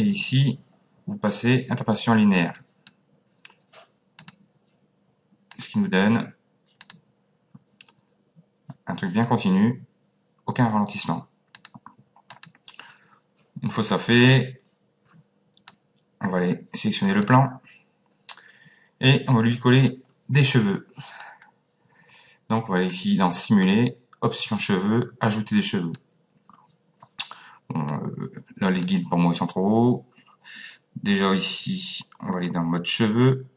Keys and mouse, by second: 2.5 click, 4.2 click, 5.5 click, 6.8 click, 11.5 click, 13.8 click, 17.0 click, 21.2 click, 27.9 click, 32.3 click.